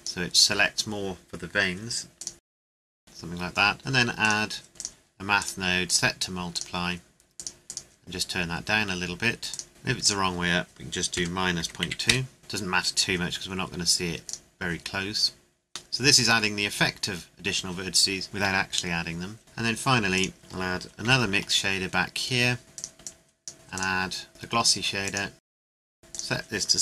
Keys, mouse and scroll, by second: 4.2 click, 9.7 scroll up 1, 10.0 click, 11.1 KP_Subtract, 11.6 KP_Decimal, 11.8 KP_2, 12.1 KP_Enter, 12.4 scroll down 1, 14.2 click, 15.9 middle click, 19.4 click, 21.1 shift+d, 22.7 click.